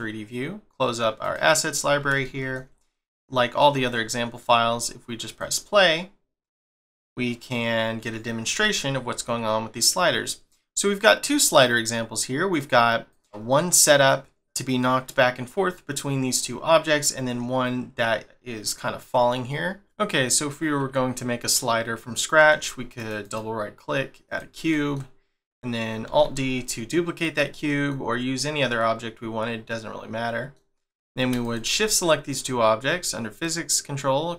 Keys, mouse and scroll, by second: 19.8 middle click, 23.0 right click, 23.2 right click, 24.7 middle click, 25.0 scroll up 1, 26.1 alt+d, 27.6 middle click, 28.8 middle click, 30.9 click.